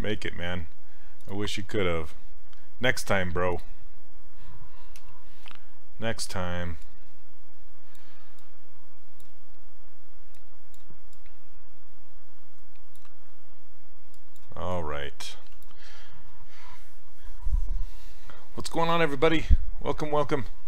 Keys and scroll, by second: 5.0 ,.